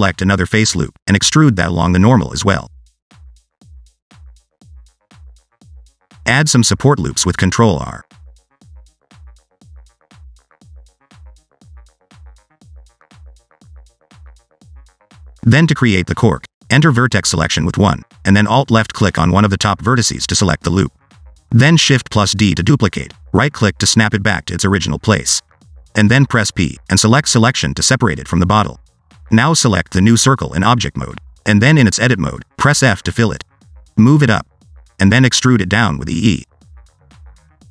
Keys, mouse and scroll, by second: 0.6 alt+e, 3.8 click, 4.4-4.8 scroll up 1, 4.8 s, 5.8 ctrl+r, 7.5 ctrl+r, 8.9 scroll down 1, 9.0 middle click, 9.4 ctrl+r, 10.3 scroll down 2, 10.4 middle click, 11.3 middle click, 11.5 Tab, 11.7 middle click, 11.9 scroll up 2, 12.1 middle click, 12.4 Tab, 12.5 middle click, 12.6 scroll up 1, 13.0 ctrl+r, 14.0 Tab, 14.2-14.9 scroll down 1, 14.9 right click, 15.8 scroll down 2, 16.7 middle click, 16.9-18.5 scroll up 2, 17.1 Tab, 17.2 middle click, 18.5 1, 20.4 alt+click, 22.0 shift+d, 25.4 p, 28.1 Tab, 28.7 click, 30.4 Tab, 31.1 a, 31.7 f, 32.3 middle click, 32.6 shift+middle click, 32.8 scroll up 2, 33.0 middle click, 33.7 click, 34.7 click, 35.8 shift+middle click, 36.2 scroll up 2, 36.6 e, 37.4 alt+z, 37.5 shift+middle click.